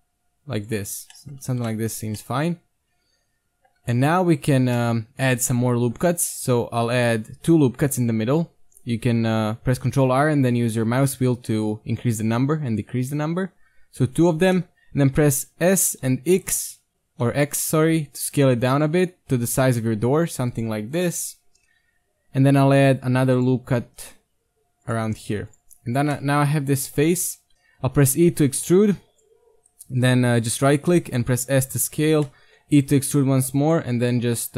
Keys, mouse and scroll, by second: 0.9 z, 1.1-2.5 middle drag, 1.4 z, 1.6 Tab, 3.8 Tab, 5.5 KP_1, 6.2 ctrl+r, 14.6 middle click, 15.7 KP_1, 16.0 s, 22.6 ctrl+r, 25.1 ctrl+Tab, 25.9 right click, 26.3 middle click, 27.4 KP_1, 27.5 ctrl+z, 27.9 e, 30.9 s, 32.3 middle click, 32.7 e, 34.3 KP_3.